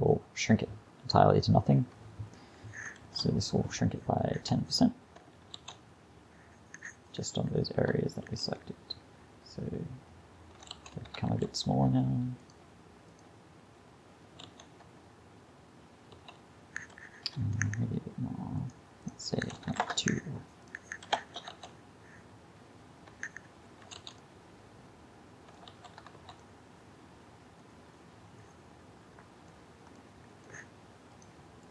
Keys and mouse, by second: 3.0 shift+Left, 5.6 alt+a, 8.3 alt+a, 8.6 click, 10.7 alt+a, 11.3 alt+a, 14.5 alt+a, 16.2 alt+a, 21.2 shift+Left, 21.5 alt+a, 23.8 alt+a, 25.7 alt+a, 26.2 alt+a, 30.1-30.5 middle drag, 31.2-31.7 drag.